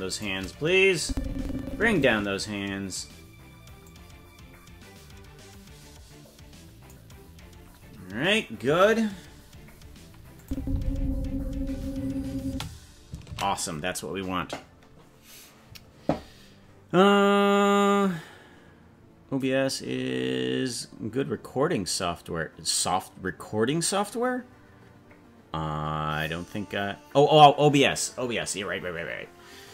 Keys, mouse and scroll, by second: 0.2 shift+right click, 1.0-2.0 drag, 2.2-2.6 scroll down 3, 3.8-6.9 drag, 10.4 click, 10.5 space, 12.4 space, 15.4 ctrl+s.